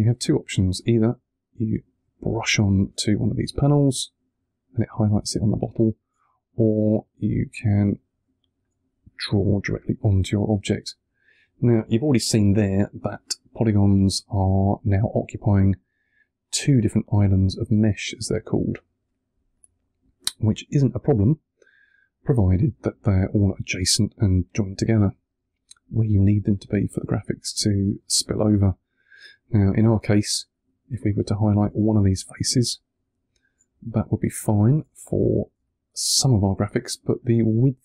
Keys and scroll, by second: 2.9 1, 8.8 1, 32.0 3.